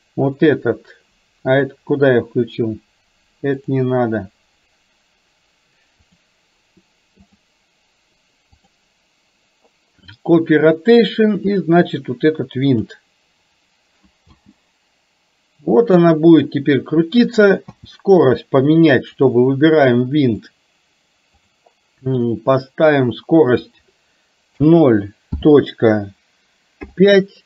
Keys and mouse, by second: 3.7 click, 6.1 click, 7.3-8.7 drag, 14.3 space, 17.7 space, 19.2 click, 20.6-27.4 drag.